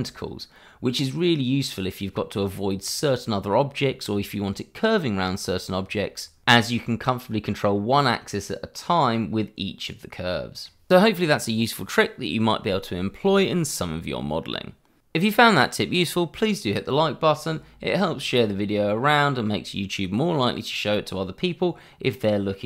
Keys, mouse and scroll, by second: 2.1 scroll down 1, 2.3 middle click, 4.1 scroll down 1, 4.3 middle click, 6.4 scroll down 1, 6.7 middle click.